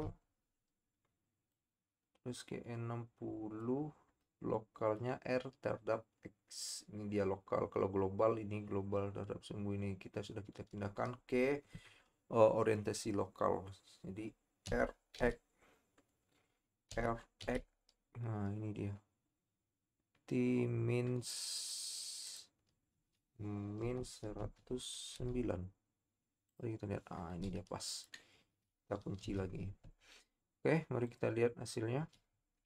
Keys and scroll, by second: 0.1 i, 14.9 r, 17.4 x, 25.1 typing, 29.4 i.